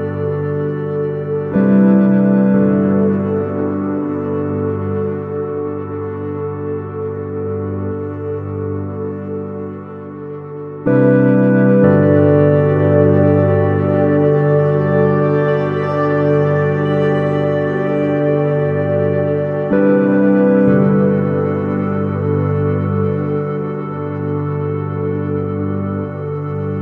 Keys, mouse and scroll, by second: 6.5-8.7 middle drag, 9.5-11.1 drag, 11.3-12.6 middle drag, 16.9-18.6 middle drag, 21.1 KP_1, 22.3 shift+z, 23.1-26.8 middle drag, 24.4 Tab.